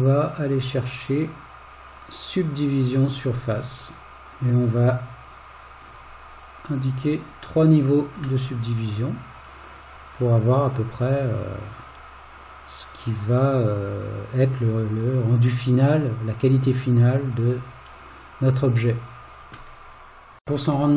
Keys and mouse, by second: 5.9 click, 8.5-19.6 middle drag.